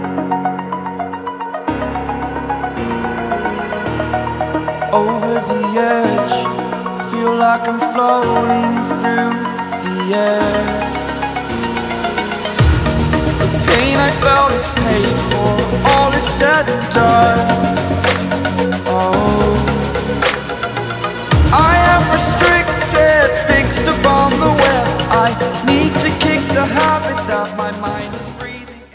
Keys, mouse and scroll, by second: 0.0 click, 4.4 click, 11.1 click, 14.4-14.7 scroll up 1, 15.7 right click, 17.0 click, 17.8-18.8 alt+scroll up 3, 19.3-20.8 scroll down 4, 23.9 click, 26.5 click.